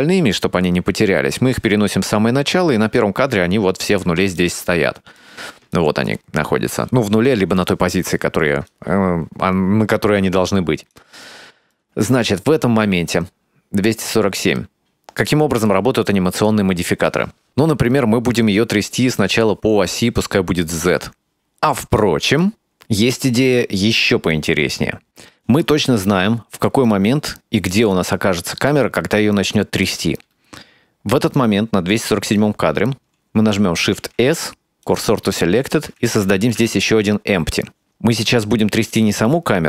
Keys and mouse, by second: 3.0-4.1 drag, 4.4 ctrl+middle click, 5.8 shift+middle click, 8.7-11.0 drag, 11.3 shift+middle click, 12.3-15.4 drag, 15.8 click, 16.2 click, 20.2-21.3 drag, 26.7-29.9 drag, 34.0 shift+s, 36.3 shift+a.